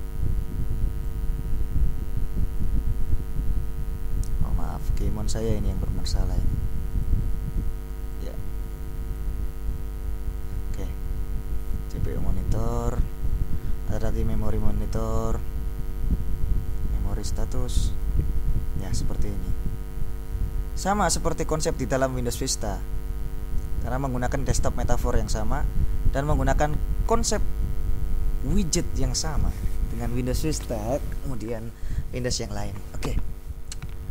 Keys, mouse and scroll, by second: 7.1 click.